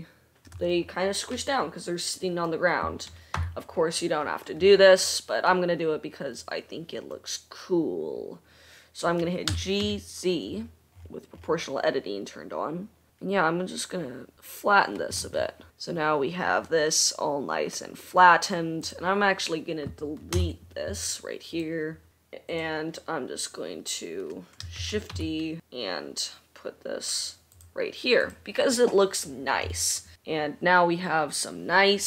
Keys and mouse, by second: 3.8 o, 10.0-14.2 drag, 10.0 g, 16.1-19.0 middle drag, 19.0 click, 19.6-21.7 middle drag, 20.9 Delete, 21.7 click, 22.1 middle click, 22.8 click, 23.0-24.9 middle drag, 25.3 shift+d, 28.5 click, 30.1-32.0 middle drag.